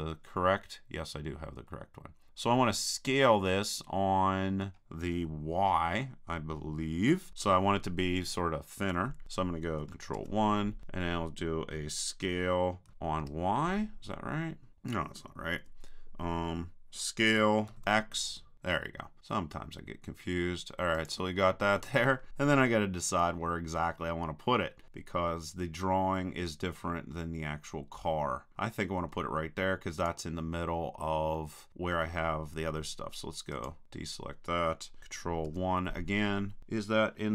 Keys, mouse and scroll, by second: 10.2 ctrl+KP_1, 12.9 s, 17.7 s, 21.1-22.8 drag, 23.2-24.8 drag, 31.3-32.7 middle drag, 31.7 click, 33.5-35.0 drag, 35.5 ctrl+KP_1.